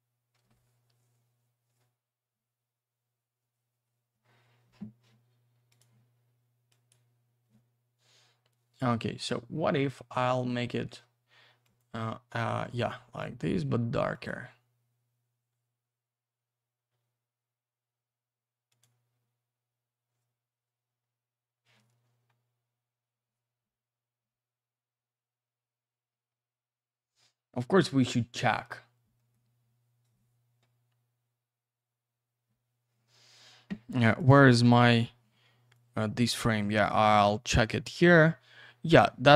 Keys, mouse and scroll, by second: 5.7 click, 6.7 click, 8.8 click, 11.6 click, 14.1 click, 18.7 click, 22.1-23.0 scroll up 1, 23.0-24.5 scroll down 1, 24.5-25.0 scroll up 1, 25.0-26.7 scroll down 1, 29.2 middle click, 34.2 click, 35.7 click.